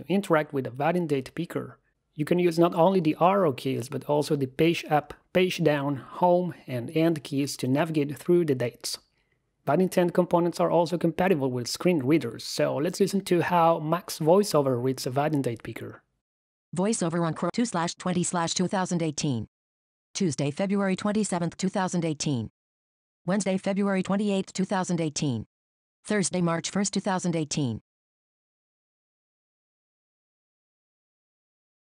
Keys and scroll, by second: 2.2 Left, 3.1 Left, 5.2 Down, 5.9 Down, 7.6 Down, 7.9 Tab, 9.2 shift+Tab, 11.2 Tab, 12.4 Return, 14.5 Down, 15.9 Down, 19.7 Down, 22.6 Right, 25.6 Right.